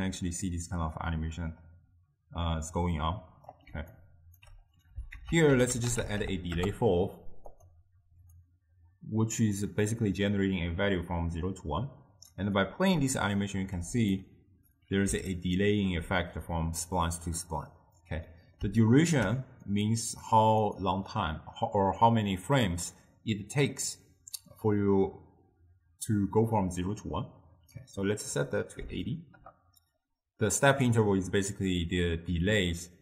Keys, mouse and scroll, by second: 3.8 d, 4.0 right click, 4.5 d, 5.2 ctrl+a, 8.4-11.5 drag, 12.7-14.1 drag, 14.1 scroll down 2, 14.2-19.7 middle drag, 19.7-20.8 drag, 28.0-31.1 drag.